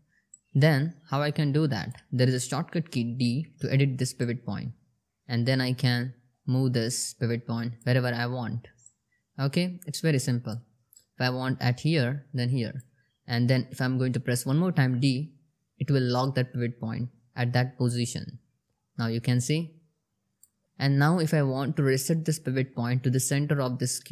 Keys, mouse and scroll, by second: 0.0-1.5 alt+drag, 2.6 d, 3.6-7.3 drag, 8.3-10.0 alt+click, 16.6 d, 17.5-19.9 drag, 20.6 d.